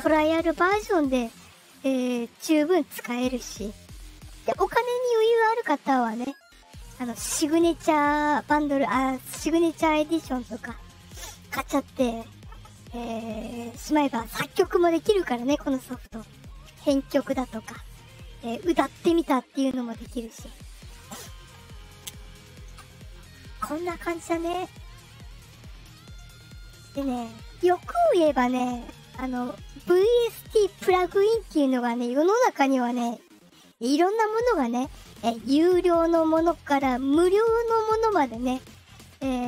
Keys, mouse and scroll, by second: 23.2-24.1 drag, 25.3 click, 26.5 click.